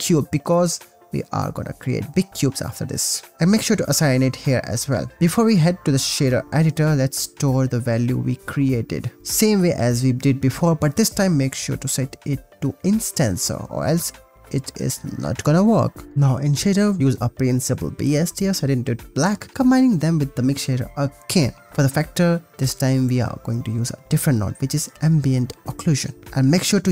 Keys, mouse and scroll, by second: 1.4 click, 3.4-4.8 drag, 5.1 shift+a, 6.8 BackSpace, 8.1 click, 8.7 click, 9.3 click, 10.1 click, 10.5 click, 11.2 ctrl+c, 11.3 click, 11.9 ctrl+v, 12.4 ctrl+s, 12.7 click, 16.0 shift+a, 19.4 click, 19.9 ctrl+shift+click, 20.9 click, 21.4 click, 21.7 g, 21.7 shift+a, 24.8 click, 25.1 click, 25.7 click, 26.4-26.9 drag.